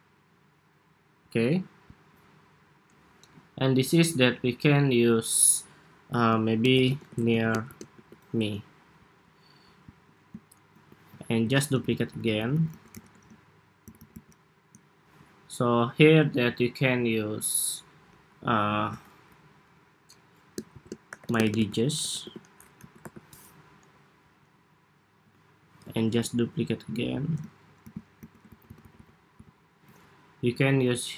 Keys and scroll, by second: 6.0 super+a, 8.2 Escape, 11.1 super+d, 13.5 alt+Right, 13.7 alt+Right, 13.9 alt+Right, 18.4 super+a, 23.5 Escape, 25.5 super+d, 27.5 alt+Right, 28.3 alt+Left, 28.4 alt+Left, 28.5 alt+Left, 28.7 alt+Left, 29.3 alt+Left.